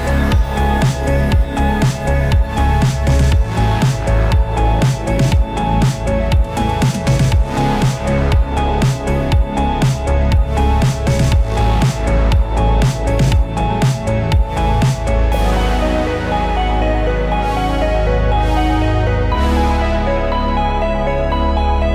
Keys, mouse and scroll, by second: 0.7 typing, 4.0-4.9 typing, 6.0 click, 6.3-7.2 typing, 9.5 click, 10.0-10.7 typing, 12.1-12.5 scroll up 1, 12.5-14.5 middle drag, 14.5 scroll up 1, 14.6-16.2 middle drag, 16.2-18.5 drag, 19.4-20.3 typing.